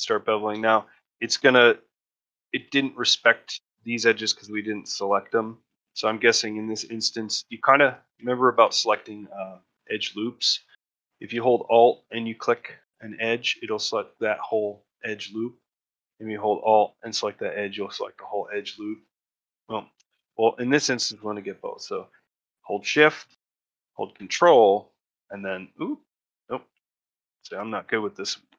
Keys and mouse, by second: 2.4 middle click, 5.5 ctrl+F1, 6.6 ctrl+middle click, 6.9 middle click, 7.6 a, 9.3 middle click, 11.4 alt+click, 12.5-13.9 middle drag, 15.0 shift+middle click, 15.4 middle click, 16.9 alt+click, 17.5 middle click, 17.8 shift+middle click, 18.3 middle click, 18.6 shift+middle click, 19.3 middle click, 26.5 a, 28.3 shift+middle click.